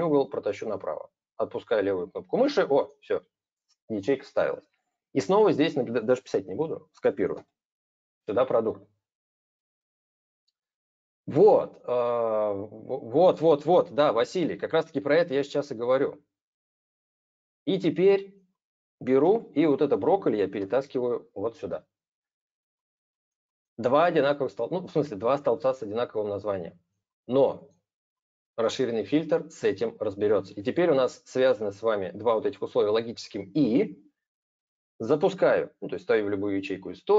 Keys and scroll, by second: 6.0 ctrl+c, 7.1 ctrl+v, 19.0 ctrl+x, 20.3 ctrl+v.